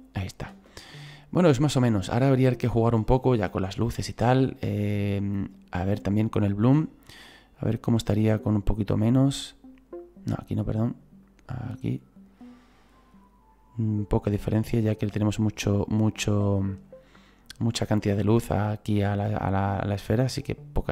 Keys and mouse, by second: 0.5 space, 1.0 click, 6.6 click, 8.5 click, 11.2 click, 14.6 click, 17.6 click, 18.7 click, 20.5 click.